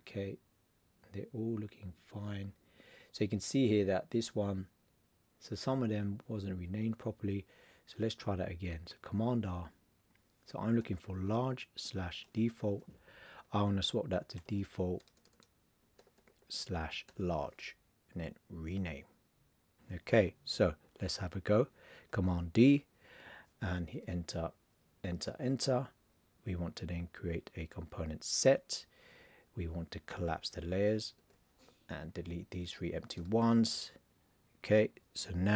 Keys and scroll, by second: 9.1 super+r, 10.8 shift+l, 12.1 shift+d, 14.2 shift+d, 17.0 shift+l, 22.1 super+d, 31.1 alt+l.